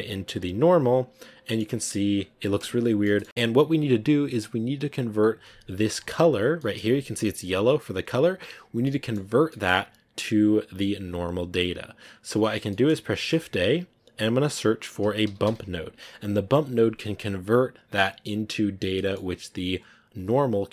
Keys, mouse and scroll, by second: 0.4 click, 0.9 scroll down 2, 1.3-2.8 middle drag, 2.8 scroll up 7, 3.2 middle click, 4.1 click, 5.9-7.0 middle drag, 8.0 click, 8.2 scroll down 7, 9.1-10.8 middle drag, 10.8-12.3 drag, 12.4 scroll down 4, 12.6 middle click, 13.4 shift+a.